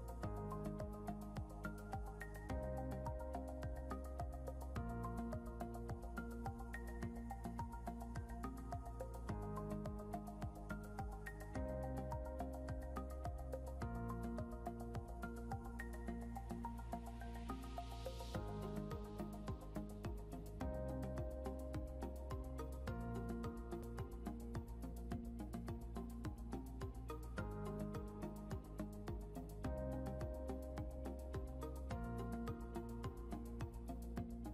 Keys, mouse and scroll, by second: 7.3-8.9 typing, 10.0-13.3 typing, 13.5 Return, 19.5-21.7 typing, 24.2-26.7 typing, 28.2-29.1 typing, 32.2 right click, 33.9 alt+Tab.